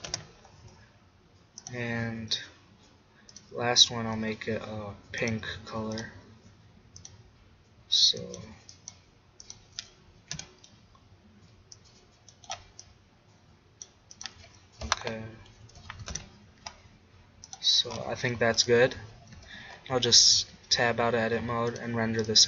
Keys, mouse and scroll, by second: 1.6-3.8 drag, 5.1 click, 5.4-8.8 drag, 17.4-19.4 drag, 19.4 Tab, 19.8 click, 21.7 click.